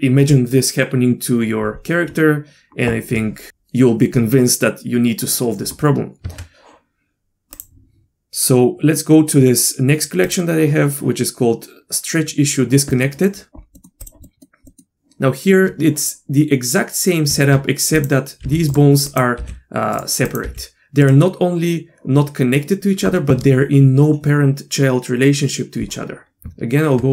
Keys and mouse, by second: 6.2 Tab, 7.5 click, 10.3 click, 12.9 middle click, 13.8 middle click, 14.0 click, 14.3 middle click, 14.7 middle click, 17.5 Tab, 17.9 click, 18.4 g, 19.4 g, 20.3 click, 21.6 g, 26.4 Tab.